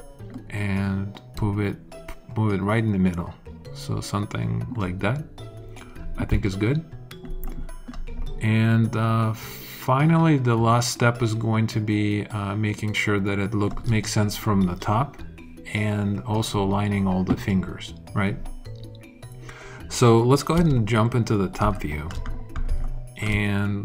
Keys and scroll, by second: 20.5 space.